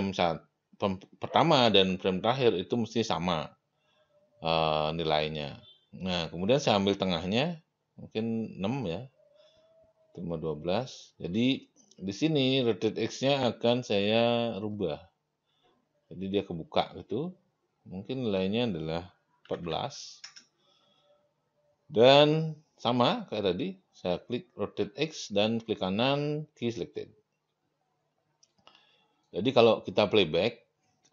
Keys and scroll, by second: 19.2-20.1 typing, 20.2 Return.